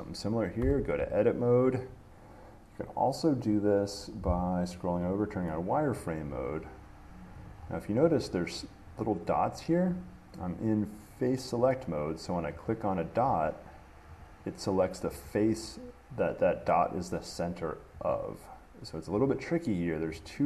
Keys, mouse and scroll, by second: 0.8 Tab, 4.1-4.8 scroll, 5.3 click, 6.2 middle click, 7.5 click, 7.8 middle click, 7.9 middle click, 8.1 middle click, 9.2 click, 10.8 click, 12.9-17.5 drag, 18.3 click, 19.5 click.